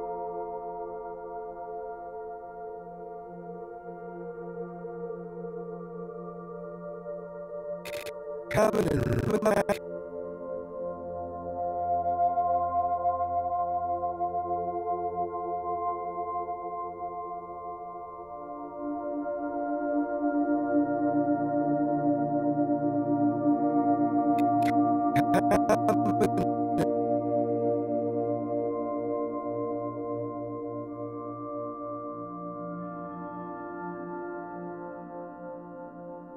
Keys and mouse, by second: 0.4 click, 1.5 click, 2.6 click, 4.2-5.5 drag, 7.1-12.5 drag, 12.9 ctrl+s, 16.1 click, 17.1 click, 17.8-18.9 drag, 20.2 i, 21.9 Right, 22.2 Right, 22.4 Right, 22.6 Right, 22.8 Right, 23.9 Right, 24.3 Right, 24.8 Right, 25.1 Right, 25.3 Right, 25.4 Right, 25.6 Right, 25.8 Right, 26.0 Right, 26.1 Right, 26.3 Right, 26.7 Right, 28.0-30.4 drag, 31.2-33.1 drag, 33.1 i.